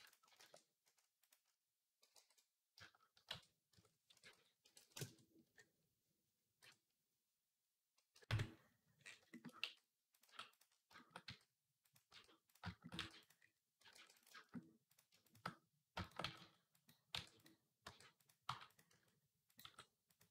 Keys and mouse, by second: 0.2 shift+a, 1.9 alt+g, 3.1 shift+c, 3.5 Tab, 3.9-10.7 drag, 3.9 r, 5.2 KP_3, 7.9 KP_Decimal, 8.1 KP_Decimal, 9.4-12.8 typing, 10.8-15.7 shift+drag, 13.7 ctrl+r, 16.0-20.3 typing.